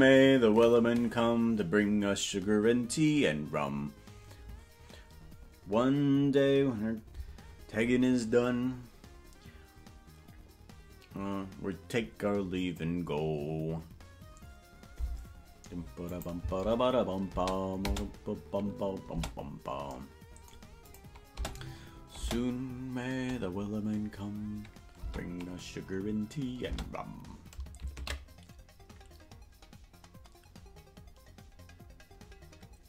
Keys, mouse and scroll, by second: 16.2 click, 16.5 space, 17.5 space, 17.9 space, 19.3 space, 21.0 click, 21.5 space, 22.5 space, 25.1 space, 25.5-25.9 scroll down 5, 26.9 space, 31.6 ctrl+s.